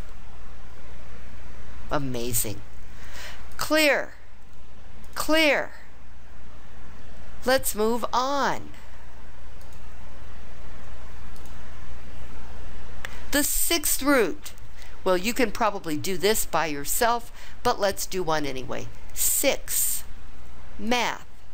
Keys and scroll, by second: 19.2 6.